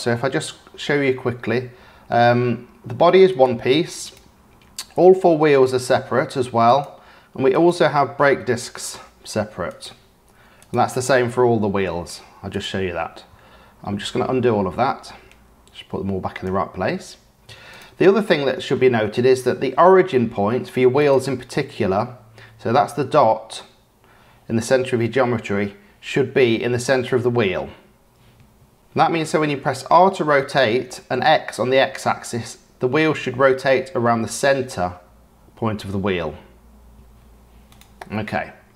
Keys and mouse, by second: 0.1 g, 4.0 click, 4.9 g, 7.5 click, 8.3 g, 10.5 click, 12.5 g, 13.8 ctrl+z, 14.3 ctrl+z, 14.9 ctrl+z, 15.3 ctrl+z, 15.8 ctrl+z, 16.5 ctrl+z, 17.1 ctrl+z, 18.2-18.7 drag, 20.1-20.6 shift+drag, 21.0-21.9 drag, 24.6 g, 29.9 r, 37.7-38.4 drag, 38.4-38.7 middle drag.